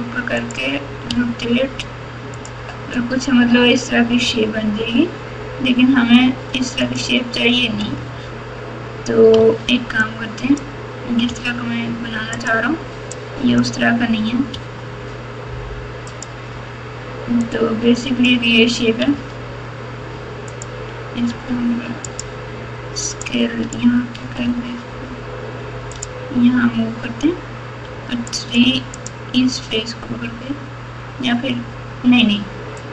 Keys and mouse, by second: 1.0 r, 4.2 r, 9.3 1, 10.0-10.6 drag, 11.2 g, 13.2-14.2 drag, 14.5 g, 17.5-18.2 drag, 19.1 g, 21.2 s, 23.2-23.7 drag, 24.4 g, 27.9 3, 28.3 click, 29.0 click, 32.7-32.9 drag.